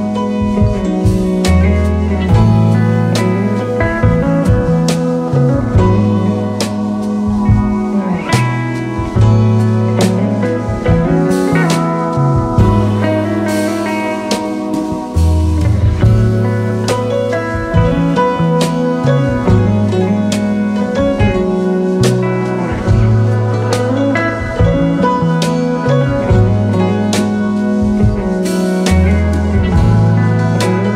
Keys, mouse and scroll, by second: 2.9 typing, 3.0 shift+click, 4.4-5.2 typing, 6.2-7.2 typing, 8.5-10.0 typing, 9.7 alt+scroll up 3, 10.6 alt+scroll up 1, 12.4 shift+click, 14.7 ctrl+a, 15.2 typing, 15.6 Return, 24.4 shift+click, 28.0-28.9 alt+scroll down 5, 29.1 alt+scroll up 3.